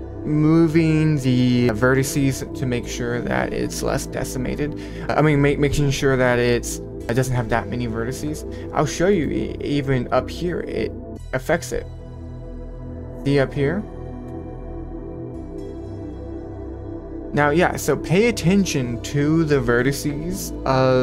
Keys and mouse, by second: 1.6 middle click, 9.1 middle click, 11.3-12.3 drag, 14.9-16.9 drag.